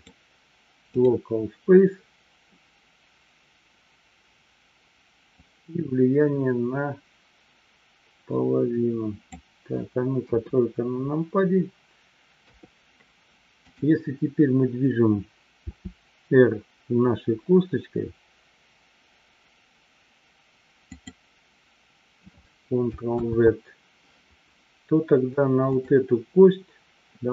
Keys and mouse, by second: 5.8-9.4 drag, 10.3 KP_3, 23.7 ctrl+z, 25.8-26.4 drag.